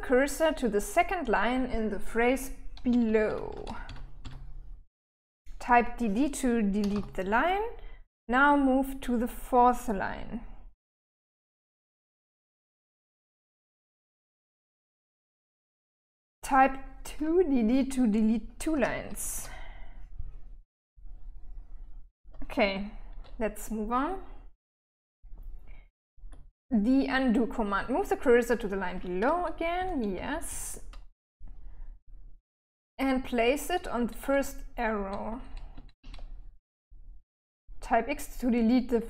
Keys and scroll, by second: 2.4-3.6 typing, 6.2 d, 6.3 d, 11.3 l, 11.8 k, 12.4 j, 12.7 j, 17.9-19.2 typing, 24.0-25.7 typing, 29.2-29.9 typing, 33.8-35.6 typing.